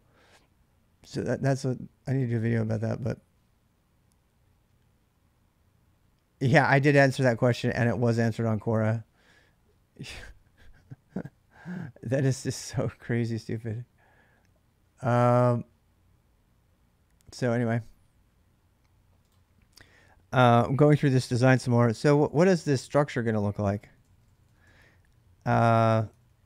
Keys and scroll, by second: 21.2 ctrl+[, 21.2 ctrl+j, 22.1-26.4 typing.